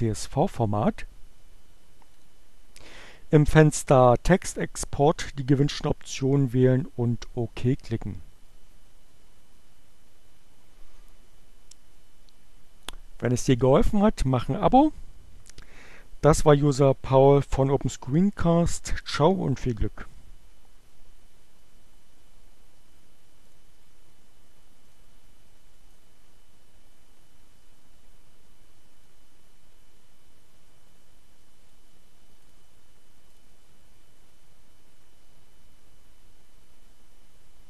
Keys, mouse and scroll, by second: 2.1 click, 23.0 click, 25.0 click, 25.7 click, 28.7-31.7 drag, 32.6 click, 33.4 click.